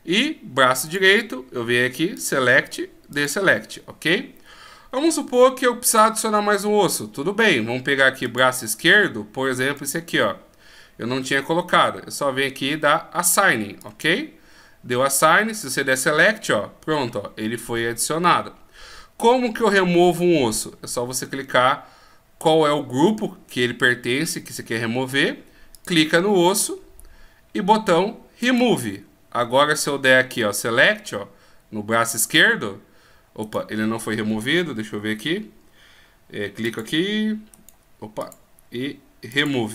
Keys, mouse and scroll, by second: 2.1 click, 3.1 click, 8.2 click, 9.6 right click, 13.8 click, 25.7 click, 26.5 right click, 28.4 click, 32.2 click, 33.4 right click, 36.6 click, 37.5 right click, 39.3 click.